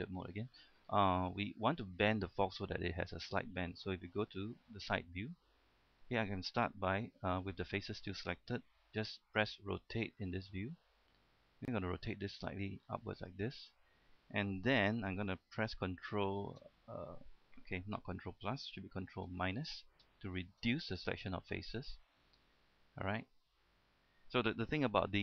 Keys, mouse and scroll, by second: 0.4 scroll down 1, 0.7-1.2 scroll up 1, 1.3-4.3 shift+middle drag, 4.6 KP_3, 6.0 shift+middle click, 10.2 shift+r, 13.5 click, 14.0-16.2 scroll up 1, 20.4 ctrl+KP_Subtract, 23.9 middle click.